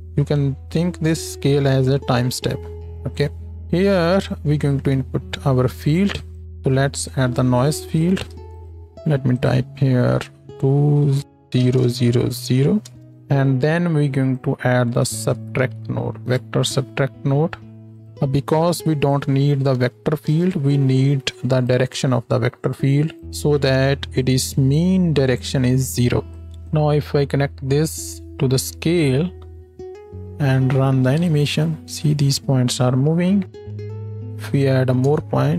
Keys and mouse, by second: 6.4-9.3 shift+drag, 6.7 shift+a, 18.0 click, 26.5 click, 31.2 space, 33.4 space, 35.2 KP_0.